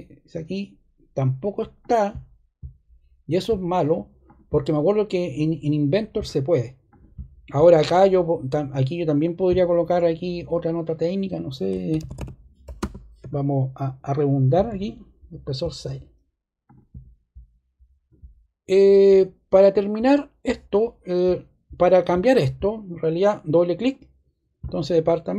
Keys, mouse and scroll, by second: 6.8 click, 9.2 click, 10.5 click, 11.6-13.1 typing, 14.5 typing, 23.5 click, 23.7 click.